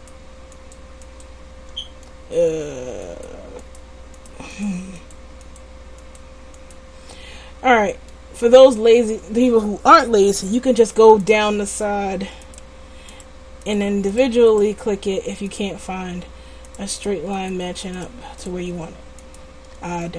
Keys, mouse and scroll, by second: 1.6 click, 2.1 middle click, 3.2-8.5 middle drag, 11.3-20.1 middle drag.